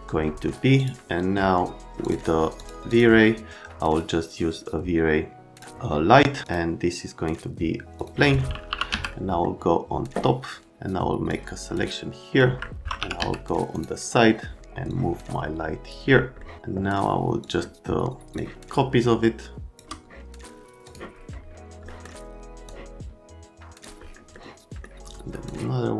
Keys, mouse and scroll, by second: 0.8 click, 2.0 click, 2.6 click, 2.9 click, 6.4 click, 8.0 click, 8.3 right click, 8.4-9.4 typing, 9.1 right click, 11.3-12.3 drag, 12.6 alt+middle click, 12.7-13.7 typing, 13.7 click, 14.2 middle click, 14.9-15.9 drag, 16.4 middle click, 17.4 click, 18.3 shift+click, 20.8 click, 21.8 right click, 22.6 click, 24.3 middle click, 25.4 middle click.